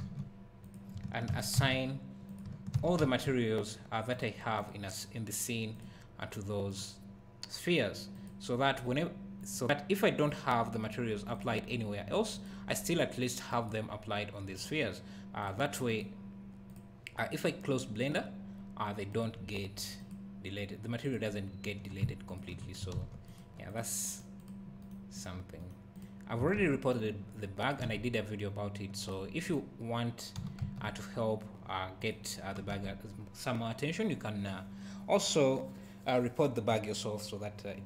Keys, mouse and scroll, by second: 0.0 g, 0.7 click, 1.3 shift+d, 2.3 click, 2.7 shift+d, 4.2 click, 22.3 shift+click, 23.0 ctrl+s, 23.3 click, 24.1 right click, 26.6 ctrl+s, 27.9 ctrl+s, 29.4 click, 30.4 g, 32.1 click, 32.8 ctrl+s.